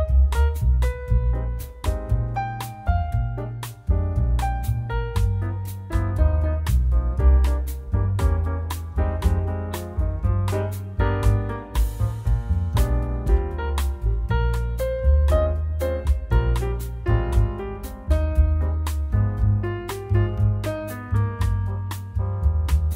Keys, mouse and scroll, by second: 0.2 middle click, 1.3 middle click, 2.3 click, 3.3 shift+a, 13.1 click, 14.4 click, 15.9 shift+a, 20.6 click, 21.6 click.